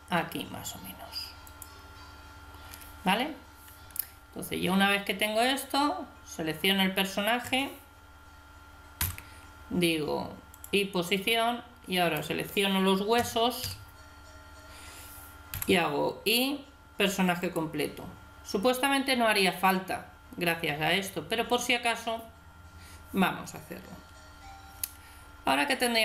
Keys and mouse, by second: 5.4 right click, 9.0 i, 11.9 right click, 13.1 a, 13.6 a, 15.5 i.